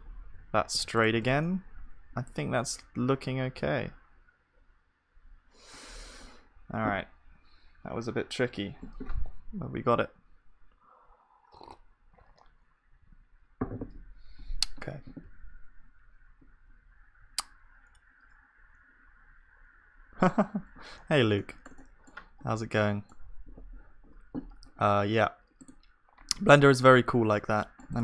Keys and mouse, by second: 0.0 Tab, 0.3 s, 1.2 ctrl+s, 5.9-15.3 middle drag, 15.3 z, 21.4-26.9 shift+middle drag, 26.9 click, 27.3-28.0 middle drag.